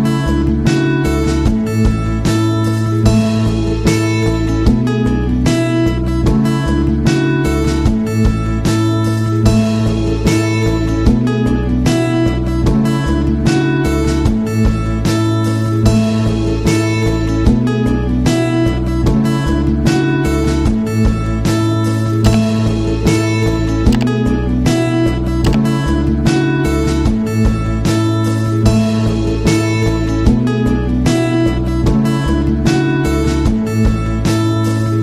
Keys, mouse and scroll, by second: 5.7 right click, 7.0 click, 8.9-11.5 drag, 14.1 click, 17.6 click, 19.9-26.1 shift+drag, 26.1-31.4 shift+drag, 33.4 right click, 34.2 click.